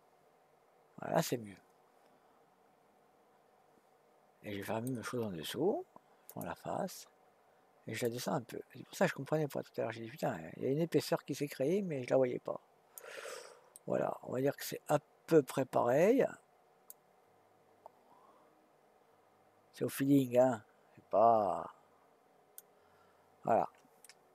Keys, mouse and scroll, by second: 6.3 click, 8.0 click, 13.7-16.9 middle drag, 16.9-18.5 drag, 24.0-24.3 middle drag.